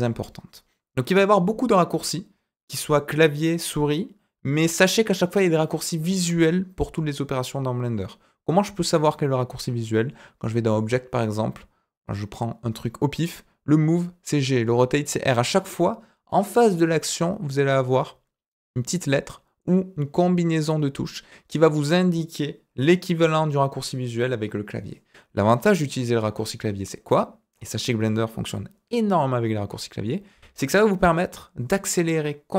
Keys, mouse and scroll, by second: 10.7-21.2 drag.